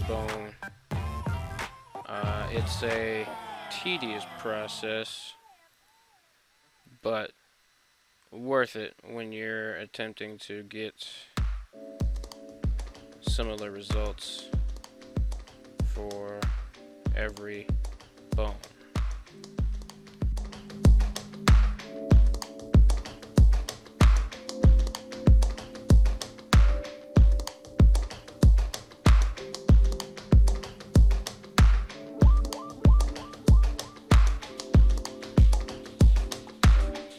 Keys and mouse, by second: 0.0 click, 4.0 ctrl+c, 5.9 right click, 6.9 right click, 9.1 ctrl+c, 10.6 click, 12.8 ctrl+v, 14.4 click, 16.3 ctrl+v, 17.6 click, 19.3 ctrl+v, 21.2 right click, 21.9 ctrl+v, 23.8 click, 24.0 click, 24.5 right click, 24.8 r, 25.3 r, 33.1 click, 36.4 click, 37.0 click.